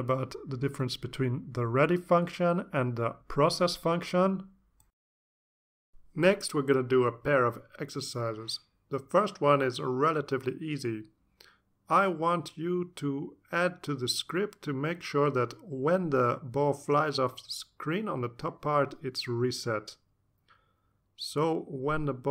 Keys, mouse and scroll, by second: 5.7 click, 6.6 click, 7.1 click, 8.8 3, 9.6 0, 9.6 0, 10.6 Return, 12.4 click, 21.3 click.